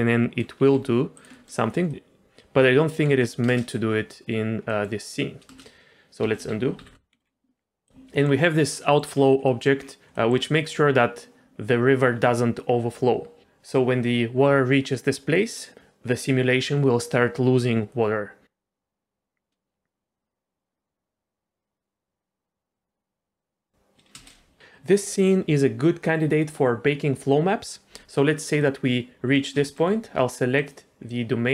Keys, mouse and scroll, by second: 0.6 g, 1.3 middle click, 1.6 scroll up 2, 1.9 middle click, 2.2 click, 3.1 middle click, 3.5 space, 4.7 middle click, 5.4 space, 6.3 ctrl+z, 6.5 ctrl+z, 6.8 ctrl+z, 7.1 middle click, 7.2 scroll down 2, 7.9 click, 8.1 middle click, 8.4 scroll up 2, 8.8 middle click, 9.1 scroll up 2, 9.4 middle click, 9.8-10.1 scroll down 2, 10.1 middle click, 15.4 middle click, 18.4 click, 18.4 space, 24.1 space, 28.7 middle click, 29.6 shift+middle click, 30.5 click, 31.0 middle click.